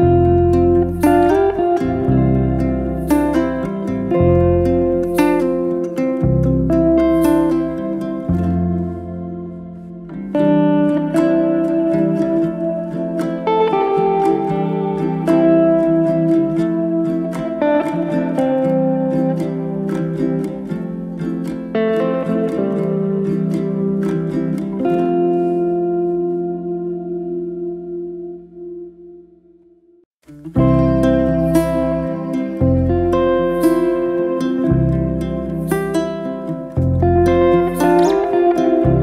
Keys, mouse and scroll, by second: 0.6 g, 2.4 middle click, 3.1 click, 4.1 click, 4.8 g, 7.1 click, 7.6 click, 7.8 g, 9.3 click, 9.7 g, 11.6 click, 11.9 g, 12.5 click, 12.7 g, 13.3 scroll down 2, 13.6-15.1 middle drag, 16.1 click, 18.1 click, 19.6-20.4 right drag, 20.4 click, 21.7 e, 22.6 e, 24.9 click, 25.4 g, 27.4 click, 27.8 g, 30.0-30.5 scroll down 1, 30.5 scroll down 1, 30.7-31.7 middle drag, 31.7 Tab, 32.2-32.5 middle drag, 32.5 scroll up 2, 32.7-34.1 middle drag, 35.6 click, 36.3-37.9 middle drag, 38.1 Tab, 38.3 middle click, 38.7 alt+z, 38.8-39.0 scroll up 2.